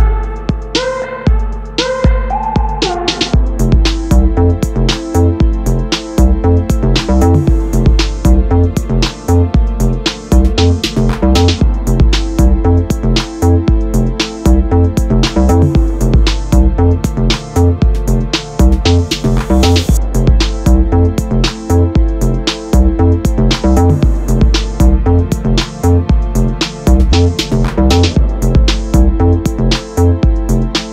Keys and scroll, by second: 2.9 Return, 5.6 ctrl+z, 8.1 ctrl+t, 12.3 space, 23.8 e, 26.1 Return, 27.4 Return.